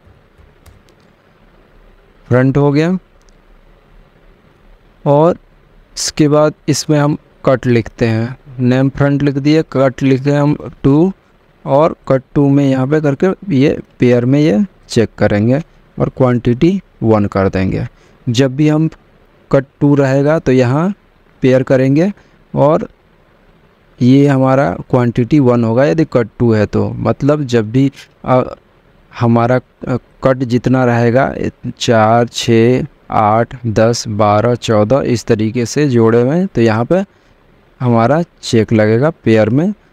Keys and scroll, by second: 0.0-1.4 typing, 16.9 1.